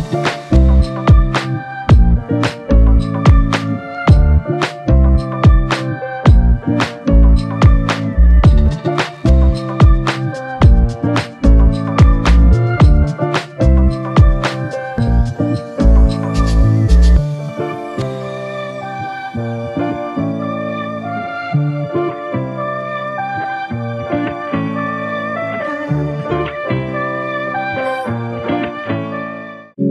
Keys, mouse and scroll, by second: 2.7 alt+click, 3.7 alt+shift+click, 4.4 alt+click, 6.2 double click, 13.9 f, 15.0 alt+click, 16.0 alt+shift+click, 22.1 double click, 23.8 shift+click.